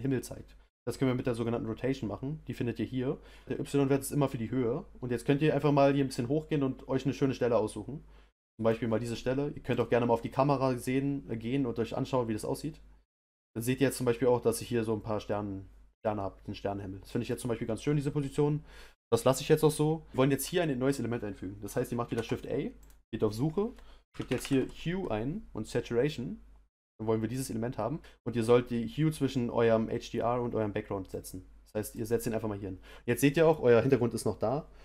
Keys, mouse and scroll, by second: 3.4-4.7 drag, 9.7-13.1 drag, 34.0-34.8 middle drag.